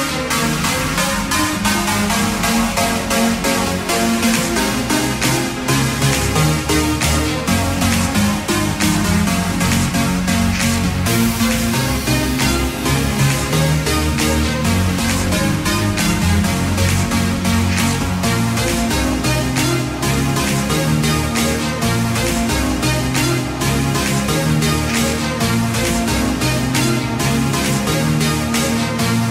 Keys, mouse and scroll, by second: 3.3 KP_1, 3.5 KP_5, 15.9 KP_3, 16.1 KP_0, 21.3 click, 27.1 KP_0.